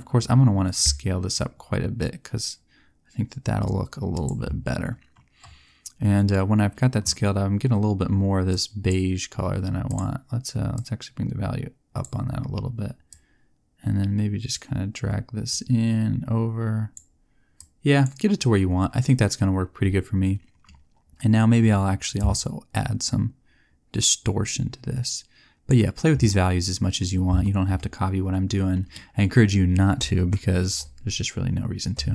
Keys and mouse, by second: 0.7-2.6 drag, 22.1 click.